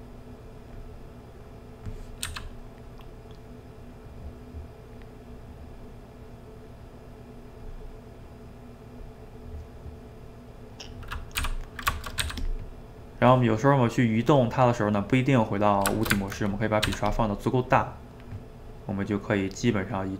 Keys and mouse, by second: 1.0-2.3 middle drag, 2.3 f, 2.6 middle click, 3.2 click, 4.1 middle click, 4.9-7.9 drag, 7.9-9.4 middle drag, 9.4-11.5 drag, 11.5 d, 11.9 shift+middle click, 12.2 f, 15.9 ctrl+shift+middle click, 16.8 f, 17.6-20.1 drag.